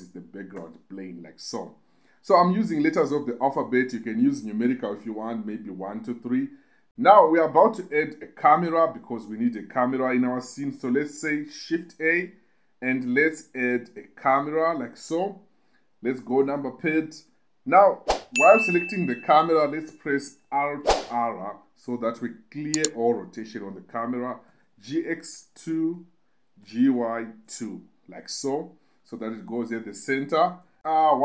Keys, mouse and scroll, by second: 7.7 KP_2, 7.9 KP_2, 8.1 KP_2, 8.5 KP_2, 11.0 shift+a, 15.7 KP_7, 20.2 alt+r, 23.8 g, 24.0 x, 24.8 2, 25.4 click, 25.9 g, 26.1 y, 26.8 2, 28.9-31.2 typing.